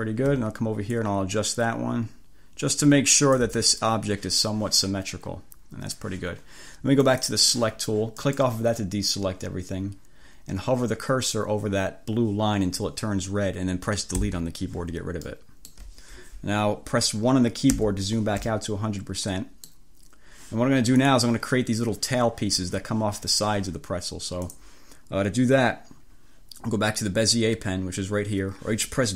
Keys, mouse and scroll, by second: 0.9-3.7 ctrl+drag, 7.2 click, 8.3 click, 14.3 Delete, 15.3 click, 17.8 1, 18.6-20.0 drag, 21.1 click, 24.6 click.